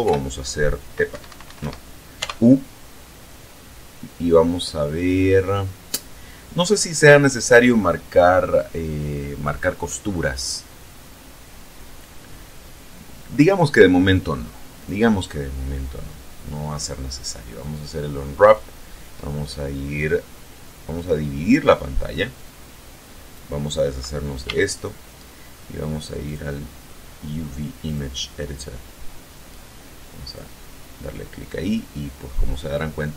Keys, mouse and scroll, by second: 0.1 i, 1.2 Escape, 2.2 u, 13.5 click, 14.8 click, 21.0-23.6 drag, 24.5 t, 26.3 click, 27.9 click, 29.0-29.6 scroll down 2, 30.3 click, 31.1-31.8 scroll up 1, 32.0 scroll down 2.